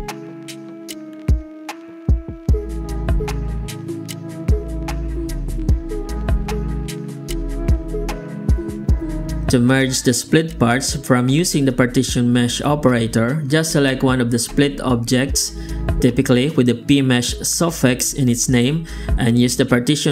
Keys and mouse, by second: 1.9 click, 4.4 click, 5.5 click, 6.2 click, 7.0 click, 8.3 middle drag, 10.6 middle click, 11.3 middle click, 12.7 z, 14.9-17.0 alt+drag, 17.2 g.